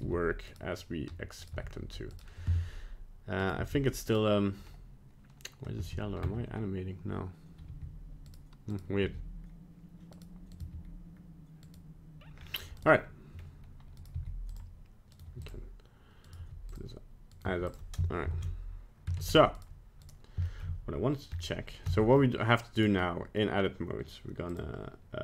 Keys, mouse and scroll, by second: 0.0 right click, 1.4 right click, 1.4 g, 1.5 g, 3.5 right click, 3.6 g, 5.8 space, 6.2 space, 7.7 g, 8.7 right click, 9.0 g, 10.6 right click, 10.7 g, 12.4 scroll down 2, 12.8 right click, 13.4-14.0 scroll up 1, 14.0 right click, 14.1 g, 15.2 right click, 15.3 g, 16.3 right click, 16.4 g, 17.3 right click, 17.5 g, 18.3 ctrl+Tab, 19.2 ctrl+Tab, 19.6 right click, 20.1 right click, 20.5 shift+middle click, 21.3 scroll up 2, 21.9 Tab, 22.2 middle click, 22.8 right click, 23.0 middle click, 24.5 click.